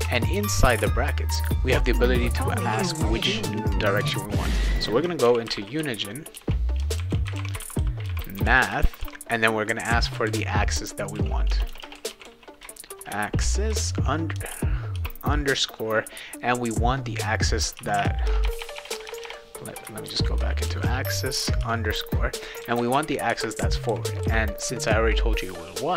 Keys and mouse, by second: 0.0-0.4 typing, 5.0-14.9 typing, 17.7-21.6 typing.